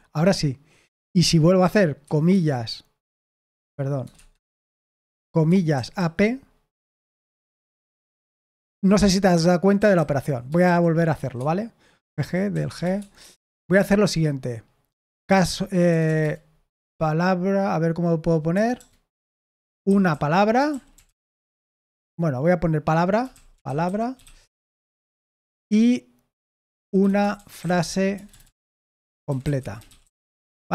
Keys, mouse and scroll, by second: 1.2-2.0 typing, 3.0 Delete, 3.5 BackSpace, 4.1 Escape, 5.1-6.4 typing, 9.7-13.4 typing, 13.7 Return, 14.7-16.7 typing, 18.5-24.7 typing, 26.5-30.7 typing.